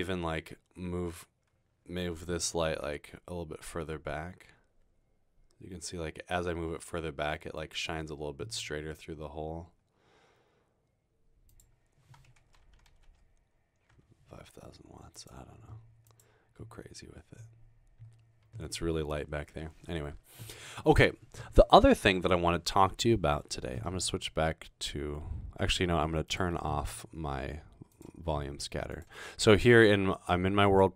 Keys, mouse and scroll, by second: 2.8 g, 11.5 click, 12.7-14.5 typing, 13.9 Return, 15.2 click, 16.1 click, 16.2-16.9 typing, 26.3 click, 27.9 click, 28.9 click, 30.6 click.